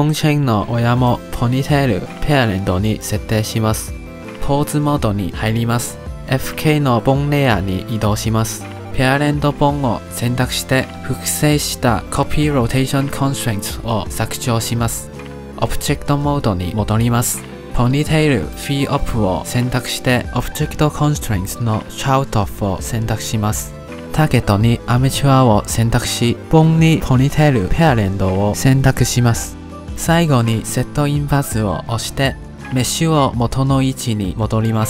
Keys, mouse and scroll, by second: 0.0 click, 0.7 click, 1.4-3.2 drag, 4.4 ctrl+Tab, 6.4 click, 6.8 click, 8.0 click, 9.0 click, 9.8 click, 11.2 click, 12.1 click, 14.8 click, 16.1 middle click, 17.0 ctrl+Tab, 17.6 ctrl+Tab, 17.7-18.1 scroll down 8, 18.1-19.2 shift+middle drag, 19.7 click, 20.5 click, 21.0 click, 21.6-23.2 drag, 24.3-27.2 drag, 27.2 BackSpace, 32.0-34.8 drag.